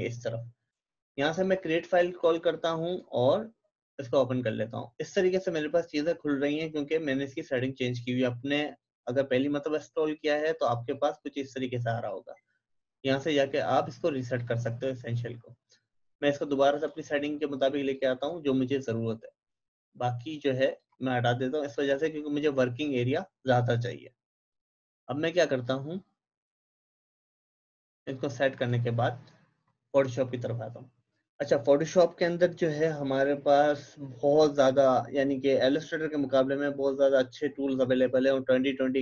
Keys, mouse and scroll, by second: 0.0-0.8 typing, 4.1-4.8 typing, 8.8 click, 13.2-23.8 drag, 23.9-28.6 drag.